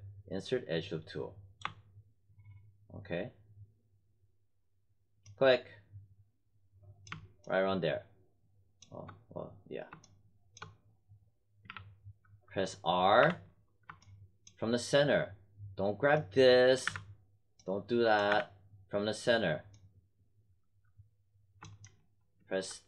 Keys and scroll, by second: 11.6 w, 13.2 r, 16.8 z, 18.2 z.